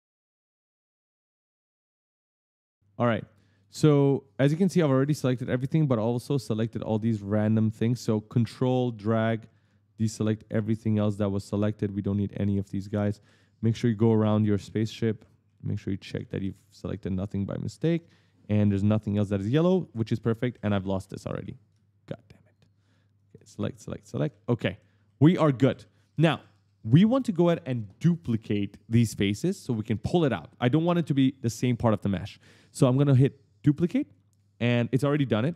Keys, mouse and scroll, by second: 0.2 shift+click, 0.9 right click, 1.1 e, 1.2 right click, 1.6 shift+click, 1.9 shift+click, 2.3 shift+click, 2.9 right click, 4.8-6.9 typing, 5.2 right click, 6.1 right click, 6.4 right click, 6.9 ctrl+right click, 8.3 ctrl+click, 9.0 right click, 9.2 a, 9.3 right click, 9.8 ctrl+click, 10.4 right click, 10.6 a, 10.7 right click, 11.2 ctrl+click, 11.9 ctrl+click, 12.4 right click, 12.5-17.6 typing, 13.9 right click, 16.1 right click, 17.6 right click, 17.6 right click, 17.7 right click, 17.8 right click, 17.9 right click, 18.0 right click, 18.1 right click, 18.6 right click, 19.2 right click, 19.7 right click, 19.9-21.7 typing, 19.9 right click, 20.0 right click, 20.4 right click, 20.7 right click, 20.8 right click, 21.2 right click, 22.3 shift+click, 23.0 shift+click, 23.4 shift+click, 23.9-27.0 typing, 24.1 right click, 25.5 right click, 26.0 right click, 26.2 right click, 26.4 right click, 27.1 right click, 33.5 click, 34.1 right click, 34.2 w, 34.7 right click, 35.2 right click.